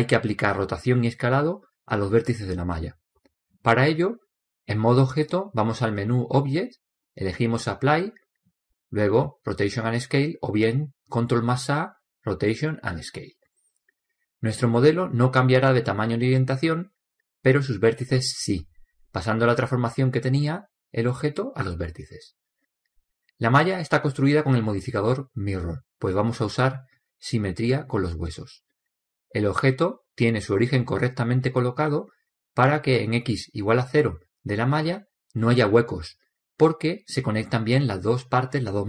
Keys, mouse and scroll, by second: 5.0-6.8 drag, 13.3 ctrl+a, 16.3-19.9 middle drag, 20.1-21.6 scroll up 1, 21.6-24.9 middle drag, 26.4-28.3 drag, 28.6-31.0 drag, 30.0 middle drag, 30.9 middle click, 35.7-37.5 middle drag, 37.5-38.6 scroll up 1, 38.6-38.8 middle drag.